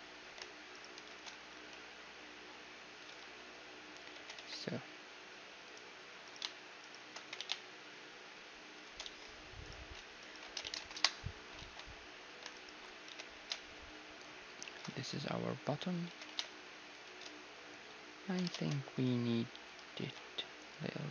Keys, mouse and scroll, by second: 0.7-2.7 right drag, 1.5 s, 3.2 z, 4.2 s, 6.3-8.8 right drag, 7.2 s, 9.1 z, 9.7-12.2 right drag, 10.5 s, 11.7 ctrl+z, 12.5-14.5 right drag, 13.1 z, 13.4 s, 14.9 z, 16.3 s, 17.6-19.5 middle drag, 18.5 ctrl+Tab, 20.0 b.